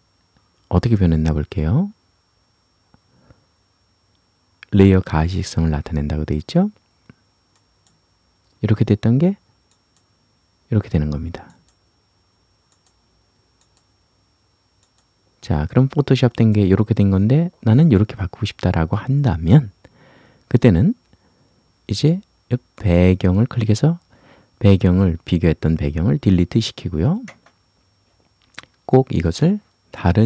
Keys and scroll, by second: 27.3 Delete.